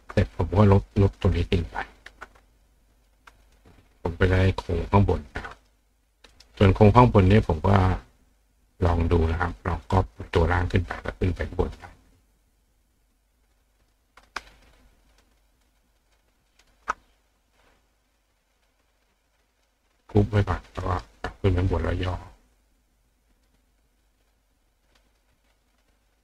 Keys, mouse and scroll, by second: 0.1 click, 1.4 click, 2.5 click, 2.9 click, 3.4 click, 5.3 click, 5.6 right click, 6.3 right click, 7.7-8.9 drag, 10.0 click, 11.6 click, 12.6 click, 13.8 click, 14.6 shift+click, 15.1 shift+click, 15.6 shift+click, 16.1 shift+click, 16.5 shift+click, 18.1 click, 19.6 click, 20.4 click, 20.8 right click, 21.9-23.5 drag, 24.1-25.2 drag, 25.8 click.